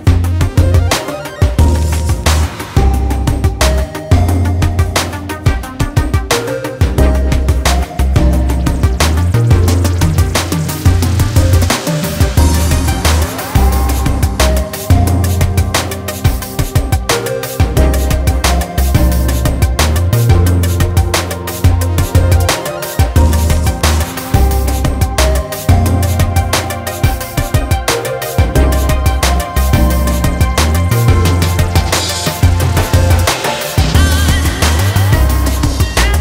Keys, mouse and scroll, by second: 0.1 Tab, 0.5 click, 0.7 ctrl+l, 1.9 click, 3.3 `, 3.7 alt+a, 3.9 scroll up 1, 5.3 click, 5.5 scroll down 1, 6.3 scroll down 1, 6.9-7.8 scroll up 3, 8.0-8.5 scroll down 2, 9.6 scroll up 1, 9.9-10.2 scroll down 2, 11.7 scroll up 1, 11.9 click, 12.1 g, 12.4 click, 12.5 a, 13.3 Tab, 13.6 scroll up 1, 13.7 alt+click, 13.9 2, 14.2 alt+click, 15.0 ctrl+e, 15.5 scroll up 1, 16.1 alt+click, 16.3 ctrl+e, 16.5 scroll down 1, 16.7-17.1 scroll up 2, 17.2 scroll down 1, 17.9 alt+click, 18.3 ctrl+e, 18.5 click, 19.0 1, 19.2 alt+click, 19.5 3, 19.7 l, 20.5 click, 22.3 a, 22.7 u, 22.9 click, 23.1 l, 23.5 click, 26.2 Tab, 26.3 scroll down 1, 26.5 a, 26.9-27.3 scroll up 2, 27.5 click, 27.7 Tab, 28.0 click, 28.2 l, 28.9 click, 29.7 Tab, 29.9 scroll down 1, 29.9 a, 30.3-30.6 scroll up 2, 30.7 Tab, 30.8 click, 31.5 2, 31.7 alt+click, 32.3 ctrl+e, 32.5-33.7 typing, 33.0 right click, 33.5 click, 34.1 click.